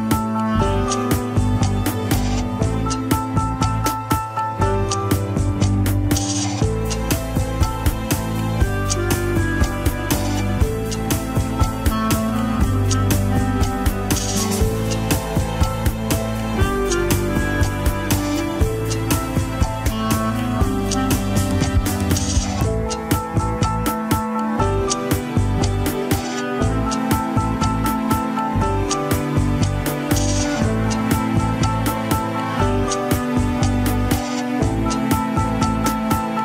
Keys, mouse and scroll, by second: 0.6 alt+z, 0.7-1.8 middle drag, 1.8 KP_3, 2.0 scroll up 1, 2.2-2.6 shift+middle drag, 2.6 scroll up 2, 3.6 scroll down 1, 3.9-4.5 middle drag, 4.5 scroll up 1, 4.6 alt+z, 4.8-5.8 shift+middle drag, 5.8 ctrl+s, 5.9 KP_1, 6.4 ctrl+Tab, 6.5 click, 6.7-7.2 scroll down 4, 7.2-7.8 shift+middle drag, 7.8 click, 8.1-8.7 scroll up 2, 8.7 click, 9.4 click, 10.2 Tab, 11.9 alt+h, 12.5 click, 13.6 l, 15.0 scroll down 2, 15.7-17.2 scroll up 1, 17.2 ctrl+i, 18.5 p, 20.2 Tab, 21.0 click, 22.1 shift+click, 23.3 shift+h, 23.7 click, 23.9 scroll up 2, 24.2-24.5 shift+middle drag, 24.5-25.2 shift+scroll up 3, 25.0 shift+middle click, 25.8 ctrl+Tab, 26.1 KP_3, 26.3-26.7 scroll up 1, 26.7-27.2 shift+middle drag, 27.2 alt+z, 27.8-28.8 scroll up 3, 31.3 Left.